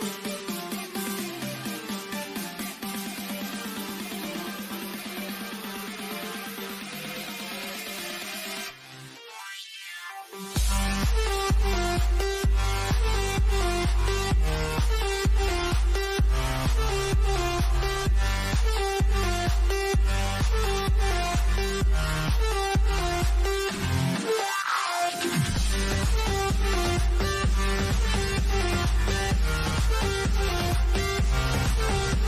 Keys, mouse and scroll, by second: 2.5-3.1 scroll up 1, 3.1-5.9 middle drag, 5.9 click, 6.9-7.4 scroll up 1, 8.7-11.6 middle drag, 13.7 scroll up 1, 17.9 click, 24.3 click, 27.2 click, 30.7 click.